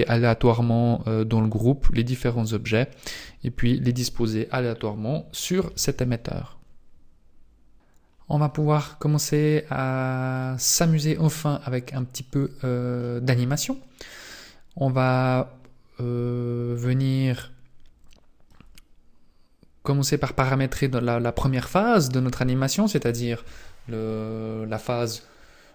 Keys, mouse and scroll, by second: 2.4 click.